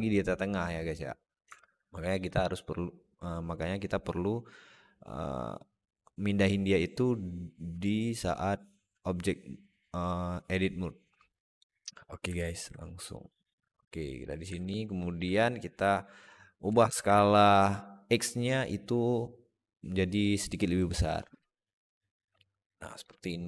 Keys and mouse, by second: 1.3 Tab, 2.2-11.4 drag, 12.2 alt+middle click, 13.0-14.1 drag, 14.4 alt+middle click, 16.5 s.